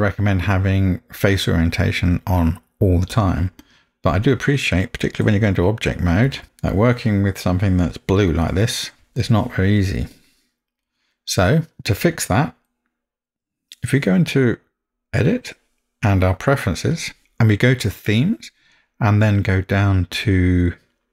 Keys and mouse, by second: 6.3 Tab, 6.6-9.1 middle drag, 15.2-17.1 drag.